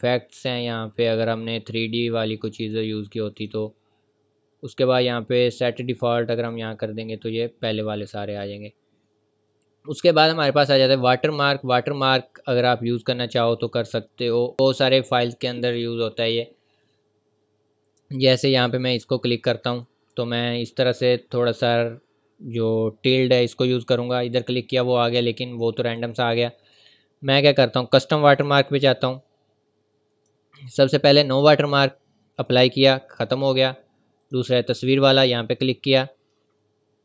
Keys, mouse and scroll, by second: 2.6 click, 6.4 click, 11.2 click, 12.4 scroll down 1, 14.5-15.2 scroll up 1, 19.8 scroll up 1, 21.2-21.7 scroll down 1, 23.0-23.3 scroll up 1, 25.9 scroll up 1, 25.9 click, 26.6-27.3 scroll down 1, 28.3 click, 32.5 click.